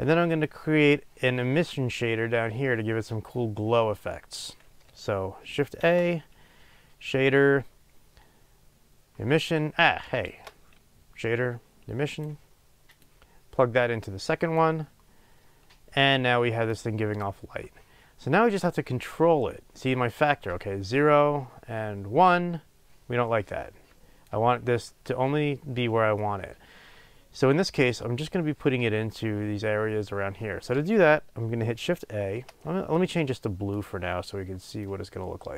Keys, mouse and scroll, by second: 0.5 click, 13.8-16.7 drag, 20.2-34.8 drag.